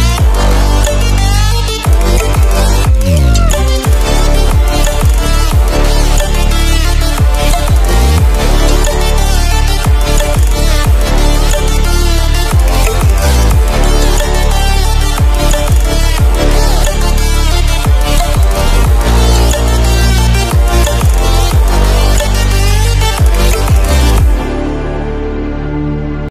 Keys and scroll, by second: 8.6 BackSpace, 10.1-12.1 typing, 13.4 Return.